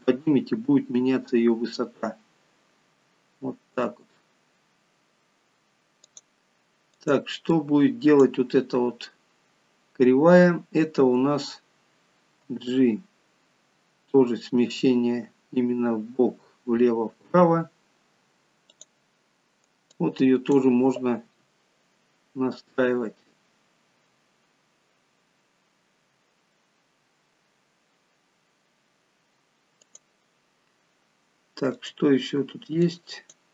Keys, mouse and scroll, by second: 6.9 click, 7.4 click, 9.2-9.8 scroll down 5, 10.5-12.5 scroll down 3, 12.5 g, 19.9 click, 21.2 g, 31.0-31.8 scroll up 1, 31.8 click, 31.8-32.8 scroll up 3, 32.8 click.